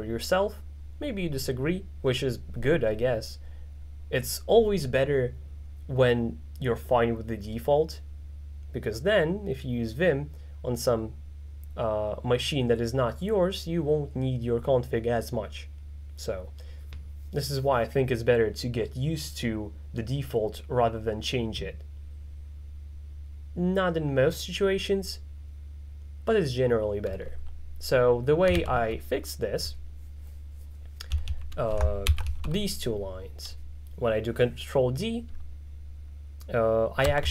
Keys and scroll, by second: 31.2-32.8 typing.